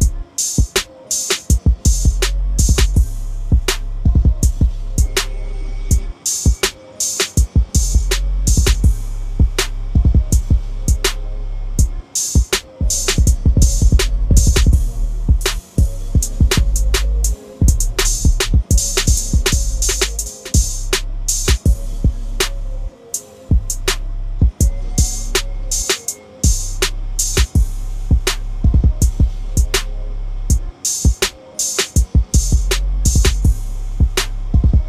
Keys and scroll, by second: 17.3 ctrl+l.